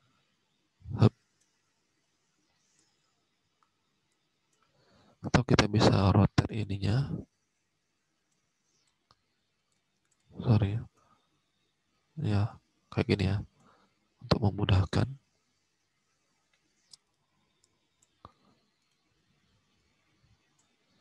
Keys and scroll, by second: 10.1 ctrl+z.